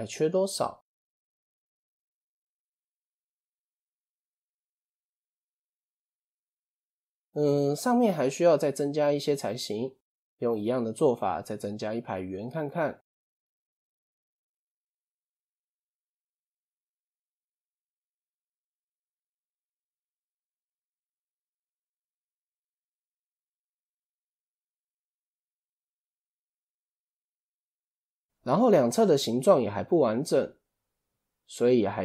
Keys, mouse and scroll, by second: 0.1 scroll up 1, 0.6 scroll down 1, 3.5 click, 4.6 click, 5.3 Tab, 5.8 click, 8.9 click, 9.5-10.0 shift+middle drag, 10.0 Tab, 12.5 click, 13.8 shift+s, 16.1 shift+a, 21.1 click, 23.1 Tab, 23.6 click, 24.0-24.3 scroll down 1, 24.3-27.3 shift+middle drag.